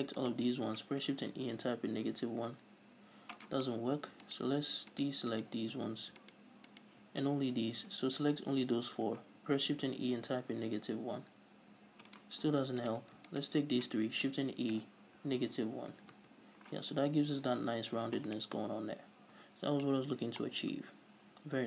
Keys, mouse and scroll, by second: 0.6 ctrl+right click, 1.5 shift+e, 3.9 right click, 4.7 shift+right click, 5.3 shift+right click, 5.7 shift+right click, 6.6 shift+right click, 7.1 shift+right click, 10.1 shift+e, 12.6 right click, 13.2 right click, 13.7 ctrl+right click, 14.6 shift+e, 16.5 Return, 17.0 Tab, 18.3 scroll down 1, 18.6-21.6 shift+middle drag, 20.5 scroll up 2.